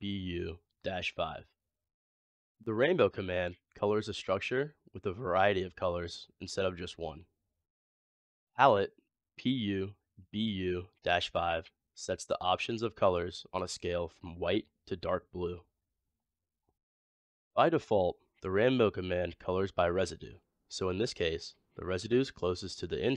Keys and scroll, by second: 3.7 typing.